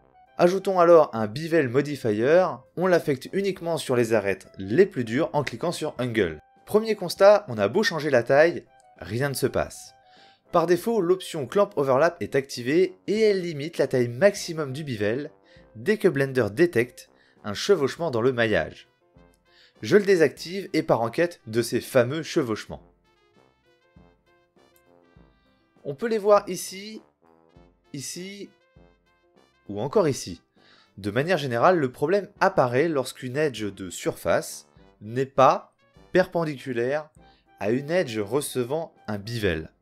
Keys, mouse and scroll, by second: 7.3-10.8 drag, 26.1 click, 26.5-28.2 middle drag, 28.4-29.5 middle drag, 29.9-32.6 middle drag, 32.7-33.6 middle drag, 36.3-38.6 middle drag.